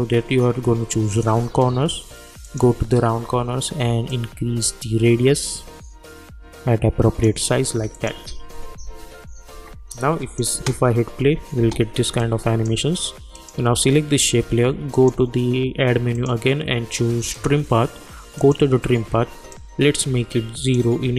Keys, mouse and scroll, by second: 1.1-7.9 drag, 8.8 u, 9.5 u, 9.9 click, 10.5 space, 12.2 click, 13.3-21.1 drag, 19.8 click.